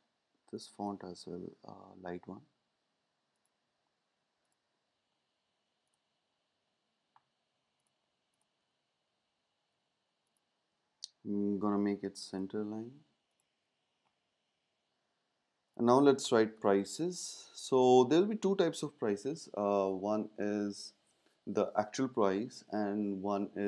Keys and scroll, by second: 16.5 typing.